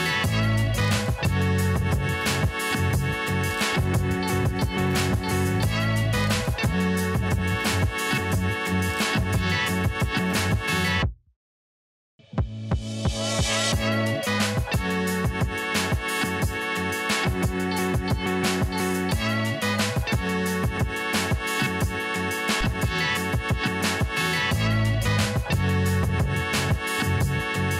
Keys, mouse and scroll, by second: 0.1-0.6 alt+scroll down 1, 0.6 alt+scroll up 1, 0.8 click, 1.6-2.6 scroll down 1, 2.6 click, 8.1-9.4 scroll up 1, 9.4-11.0 drag, 11.0-11.5 scroll up 1, 11.5-17.9 drag, 17.9-19.2 scroll down 1, 19.2 click, 19.9-20.3 scroll down 1, 20.3-21.0 scroll up 1, 21.0-25.2 drag, 25.2 click.